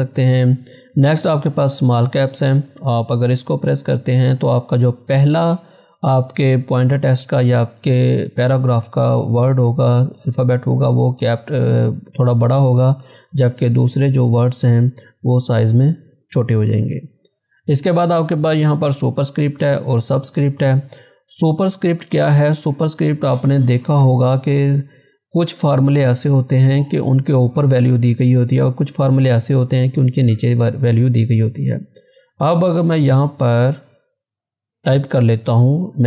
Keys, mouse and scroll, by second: 2.5 click, 17.1 click, 31.9 click.